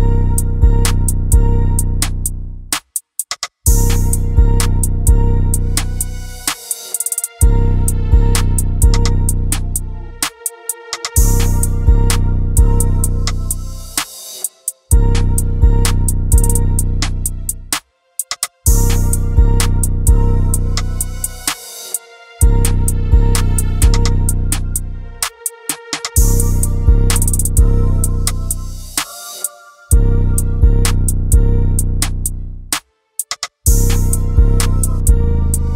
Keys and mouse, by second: 0.4 shift+a, 2.9 s, 4.9 click, 5.4 click, 7.9 click, 10.3 Delete, 11.4 shift+a, 14.0-17.3 drag, 18.3-22.2 drag, 22.8-24.2 drag, 25.7 Tab, 29.6 ctrl+z, 30.8 click, 32.4 shift+click, 35.5 shift+click.